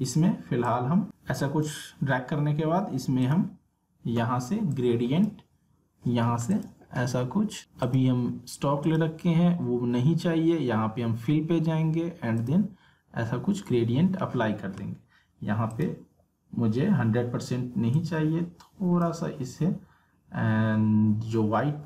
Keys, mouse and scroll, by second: 0.6 click, 12.3 click, 15.7 click, 17.9-21.4 drag.